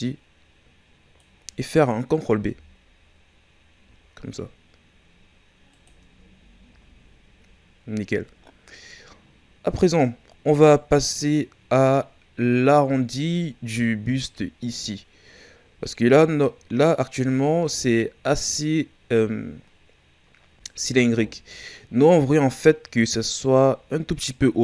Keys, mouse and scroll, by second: 2.3 ctrl+b, 6.1 Tab, 6.8 scroll down 2, 9.5-12.8 scroll up 2, 13.4-14.7 shift+scroll down 5, 16.0-17.4 scroll down 2, 17.4-18.6 shift+scroll up 2, 18.8 shift+scroll up 1.